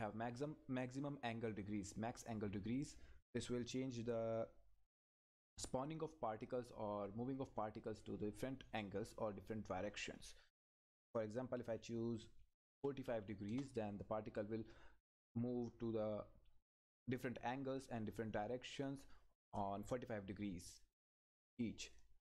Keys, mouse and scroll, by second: 2.7 click, 15.3 Return, 21.6 click.